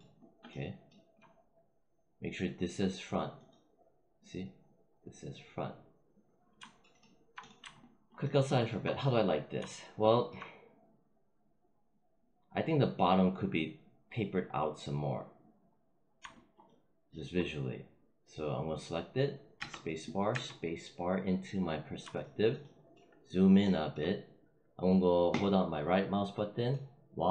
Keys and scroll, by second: 19.5 space.